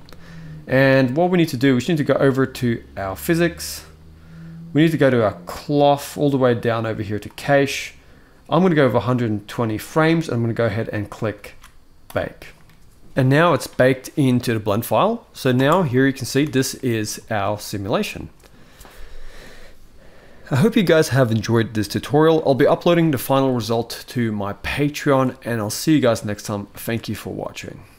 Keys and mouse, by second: 7.0 click, 11.2 ctrl+s, 11.8-13.1 drag, 15.3 space, 16.2 alt+a, 16.5 middle click, 17.0 shift+middle drag, 23.2-23.6 middle drag, 24.8-25.2 middle drag, 26.4 shift+middle click.